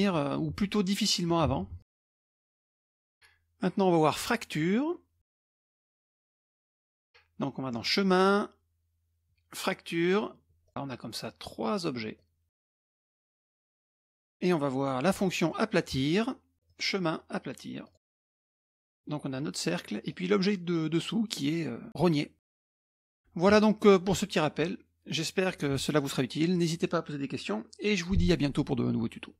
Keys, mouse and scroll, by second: 0.0 ctrl+z, 1.5 ctrl+z, 1.8 click, 1.8 middle click, 2.0-2.3 scroll up 2, 2.3-3.4 middle drag, 4.5 middle click, 5.3 click, 5.7 shift+click, 6.0 shift+click, 6.2 shift+click, 6.3 space, 6.9 scroll up 1, 7.7 click, 10.0 click, 10.7 click, 11.2 click, 12.2 click, 12.7 click, 13.1 middle click, 13.5 click, 13.8 shift+click, 14.0-15.4 drag, 14.1 space, 15.4 middle click, 16.7 click, 17.8 click, 18.5 click, 20.1 click, 22.4 click, 22.7 middle click.